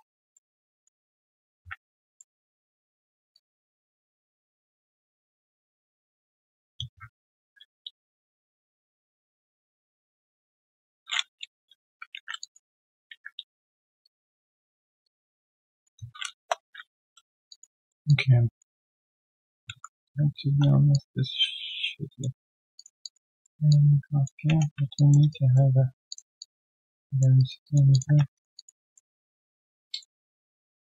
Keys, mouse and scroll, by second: 0.3 alt+middle click, 0.7 alt+click, 1.0 alt+middle click, 1.5 ctrl+z, 2.1 alt+middle click, 3.3 alt+click, 4.0 alt+middle click, 4.4 alt+click, 4.9 alt+scroll down 1, 5.2 alt+click, 5.7 alt+middle click, 6.0 alt+click, 6.8 q, 7.4 ctrl+shift+x, 9.4 shift+click, 10.5 shift+click, 12.4 alt+click, 12.6 alt+right click, 13.1 ctrl+z, 14.0 shift+click, 15.0 shift+click, 16.3 Return, 16.6-17.0 scroll down 1, 17.0 ctrl+z, 17.2 alt+right click, 17.8 alt+middle click, 18.0 alt+click, 20.2-20.9 typing, 20.9 ctrl+shift+click, 23.0 alt+click, 23.3 alt+middle click, 23.7 alt+click, 24.9 alt+click, 25.2 q, 25.3 right click, 25.7 alt+scroll down 3, 26.3-26.9 alt+scroll down 1, 27.3 alt+right click, 27.6 alt+click, 28.0 1, 28.3 alt+right click, 28.5 alt+click, 28.8 alt+middle click, 29.1 alt+click, 29.8 alt+middle click, 30.3 right click, 30.6 q.